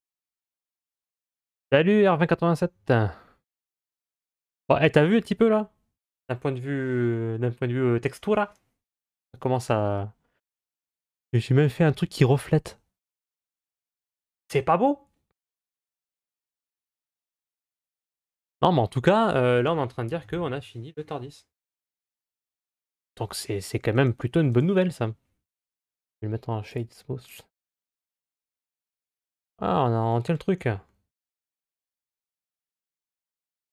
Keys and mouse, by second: 4.2-9.0 middle drag, 10.4-11.7 middle drag, 25.4 w, 27.6-28.5 middle drag, 33.0 click.